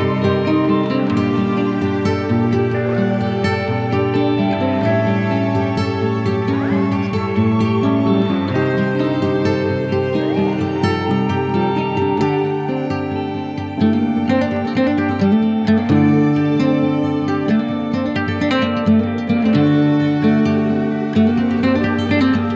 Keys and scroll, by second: 9.0 z, 10.4 b, 13.5 x, 14.8 shift+\, 22.2 [.